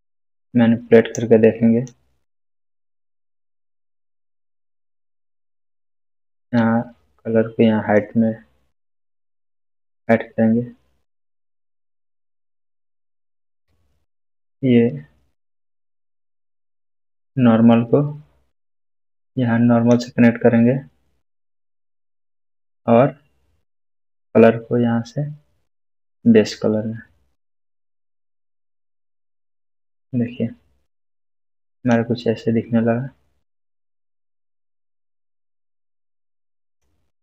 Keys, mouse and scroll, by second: 6.5 click, 6.6-8.1 drag, 11.1 click, 11.9-13.5 middle drag, 16.7-20.2 drag, 24.1-26.3 drag, 31.9-36.9 drag.